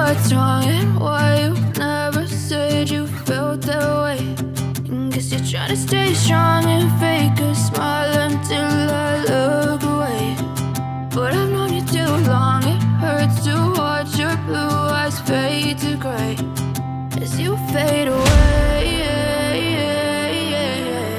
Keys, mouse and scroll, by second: 0.4 F9, 4.9-5.3 scroll up 1, 5.3 click, 5.8 click, 6.0-6.5 scroll down 1, 9.2 ctrl+click, 10.8 click, 11.0 double click, 11.6 ctrl+click, 14.1 ctrl+r, 15.4 F4, 16.4 F9, 19.5 ctrl+o, 20.3-20.6 scroll down 1.